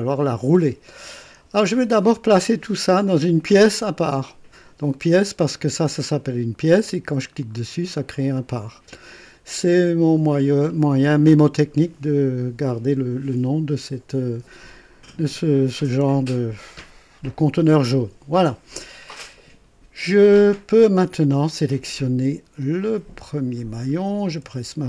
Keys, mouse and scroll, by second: 6.7 click, 7.6-7.9 scroll down 1, 21.7 scroll up 1, 22.8 click, 23.4 scroll down 1.